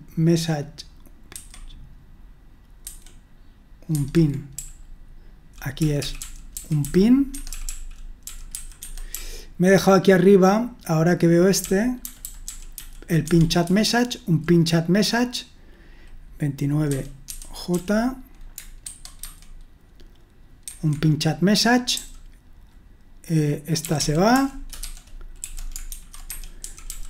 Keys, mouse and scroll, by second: 1.3 super+1, 2.8 super+2, 4.0 super+1, 4.6-14.4 typing, 16.7-18.2 typing, 18.8 super+1, 19.2 super+2, 20.7 super+1, 21.9 j, 23.7-27.0 typing, 26.2 Escape.